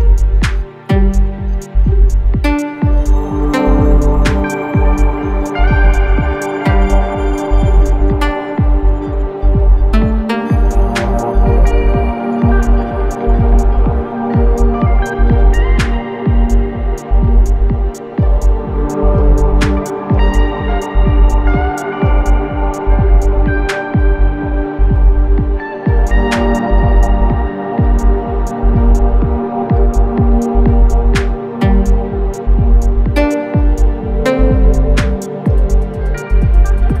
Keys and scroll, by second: 18.5 ], 19.2 ], 24.4 ], 25.6 4, 32.7 3, 34.0 4.